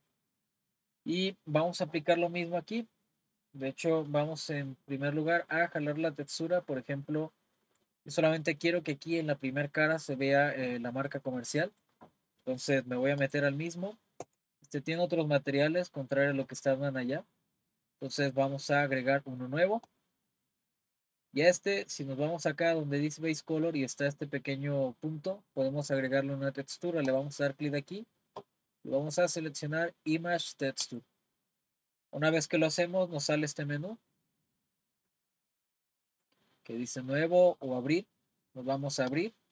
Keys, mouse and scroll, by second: 0.0 click, 0.7-1.1 scroll down 1, 1.1-1.8 middle drag, 1.8-2.2 scroll down 3, 2.2-6.8 middle drag, 7.6 click, 11.7 click, 13.2 click, 14.2 Tab, 19.9-21.5 drag, 21.5-22.8 scroll down 1, 22.8-24.2 scroll down 1, 24.2-24.5 scroll down 1, 27.1-30.2 drag, 35.1-39.5 drag.